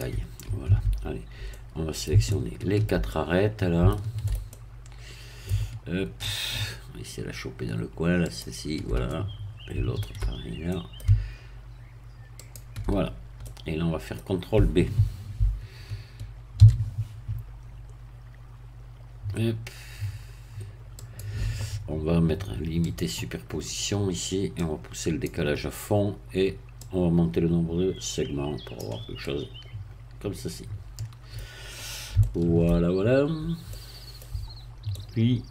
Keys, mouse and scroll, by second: 0.7 Tab, 1.3 scroll up 2, 1.5-5.9 middle drag, 8.3 shift+click, 9.1-10.4 shift+middle drag, 10.4 shift+scroll up 2, 10.7 middle click, 12.4 shift+click, 13.1-13.4 shift+scroll down 2, 13.4-14.7 middle drag, 16.6 ctrl+b, 21.0 click, 22.9 click, 24.6 click, 26.8-28.9 drag, 29.2-31.5 middle drag, 31.5-32.1 scroll down 1, 32.2 shift+middle click, 33.7 middle click, 34.9-35.5 middle drag.